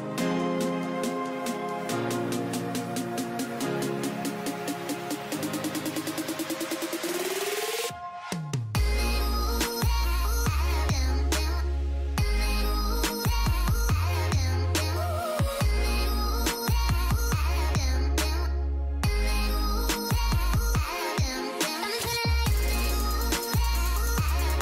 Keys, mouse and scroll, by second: 8.0 double click, 8.1-8.6 alt+scroll up 1, 9.6 scroll up 1, 10.7 typing, 12.8 typing, 16.6-17.3 alt+scroll up 1, 17.8-19.3 typing.